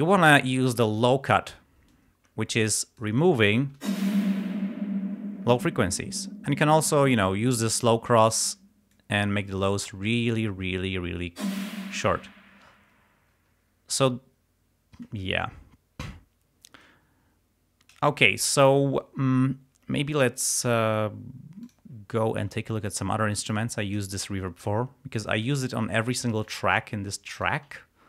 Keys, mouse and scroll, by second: 1.9-3.3 drag, 3.8 space, 6.7-8.0 drag, 8.2 click, 11.4 space, 13.4 space, 21.7 click, 24.6 click, 25.5-26.7 drag, 27.4 click, 27.8 scroll down 2.